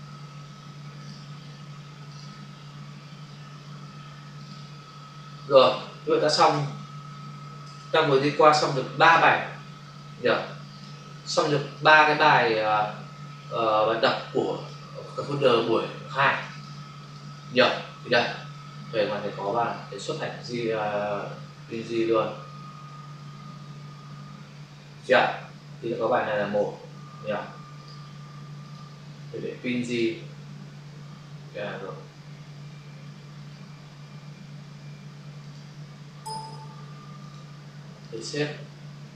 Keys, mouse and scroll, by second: 1.0 click, 2.0 click, 2.1 click, 4.4 click, 6.5 ctrl+s, 7.5 ctrl+alt+w, 8.9 click, 9.1 click, 10.6 click, 10.8 click, 13.5 Escape, 14.4 click, 16.3 click, 16.4 click, 16.6 double click, 16.9 click, 17.1 click, 17.5 click, 17.7 double click, 18.5 click, 19.6 click, 26.3 ctrl+shift+s, 27.7 click, 27.8 click, 28.5 click, 28.7 double click, 29.8 click, 29.9 click, 33.4 click, 35.4 click, 35.5 click, 37.2 click, 37.9 click, 38.1 click.